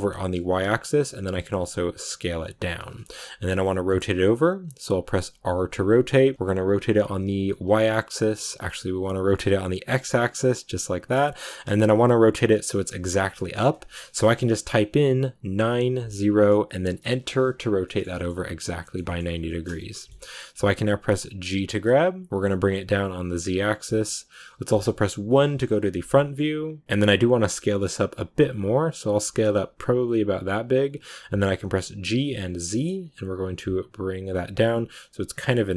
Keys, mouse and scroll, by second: 2.9-5.2 shift+middle drag, 5.2 r, 17.7-21.4 shift+middle drag, 21.4 g, 25.2 KP_1, 26.0-27.2 shift+middle drag, 27.2 s.